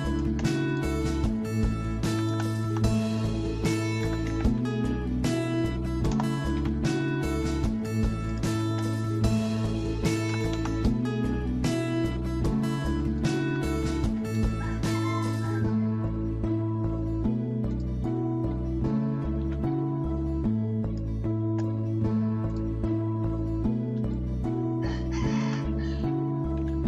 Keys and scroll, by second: 0.2 m, 1.9-4.9 typing, 6.1 BackSpace, 6.6 t, 8.0-8.8 typing, 9.9-10.7 typing, 11.8 Escape, 13.3-14.0 typing, 18.2-18.9 typing, 19.4 Escape, 20.5-21.3 typing, 26.4-26.8 typing.